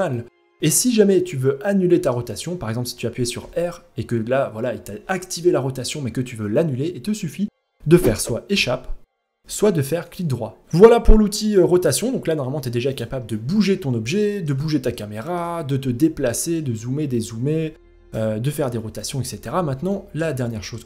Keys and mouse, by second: 2.9 r, 9.0 r, 10.4 middle click, 11.3 g, 12.9-13.2 middle drag, 13.7 middle drag, 14.2 middle drag, 14.7 shift+middle click, 15.9 middle drag, 17.3 g, 18.0 middle click, 18.3 r, 19.0 ctrl+z, 19.5 middle drag, 20.0 shift+middle click, 20.5-20.8 middle drag.